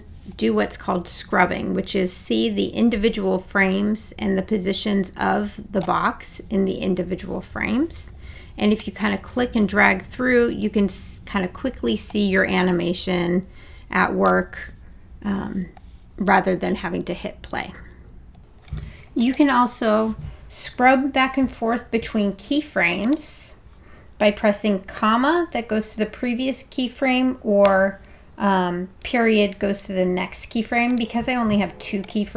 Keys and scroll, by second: 25.0 ', 27.7 ..